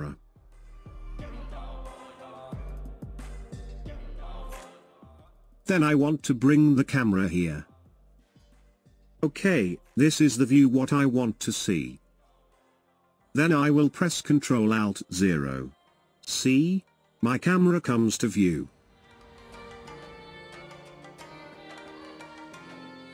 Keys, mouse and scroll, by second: 0.3-2.7 shift+middle drag, 2.7-3.1 scroll up 2, 3.1-9.7 shift+middle drag, 9.7-11.8 scroll down 1, 14.1 alt+KP_0, 17.6 scroll down 2, 18.2-21.3 middle drag.